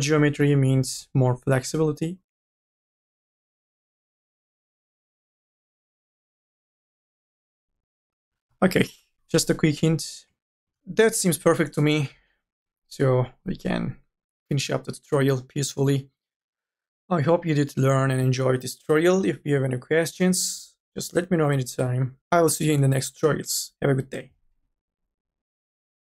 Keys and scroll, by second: 0.0-0.3 typing, 9.2-10.9 typing.